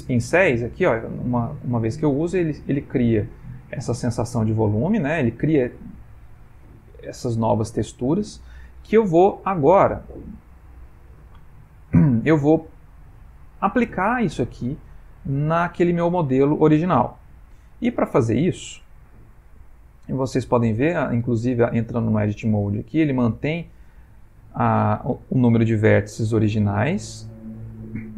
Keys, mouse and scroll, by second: 0.6 click, 9.6-10.0 middle click, 9.9 middle click, 19.5 middle click.